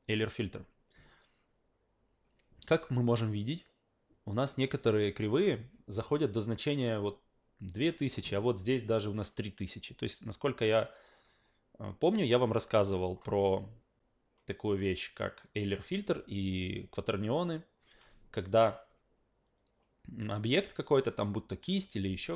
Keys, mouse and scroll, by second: 0.0 click.